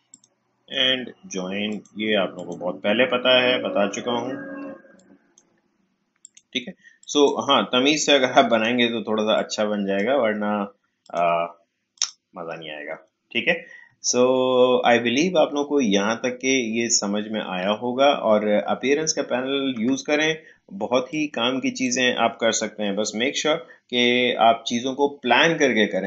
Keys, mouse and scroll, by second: 0.7 right click, 1.7 click, 2.9 alt+scroll down 1, 3.6-4.1 scroll up 2, 4.6 space, 4.9 click, 5.1 space, 6.2-11.0 drag, 14.2 alt+scroll up 1, 14.9 alt+scroll down 1, 15.9-17.0 alt+scroll up 1, 17.0-17.6 alt+scroll down 1, 21.1-24.3 drag.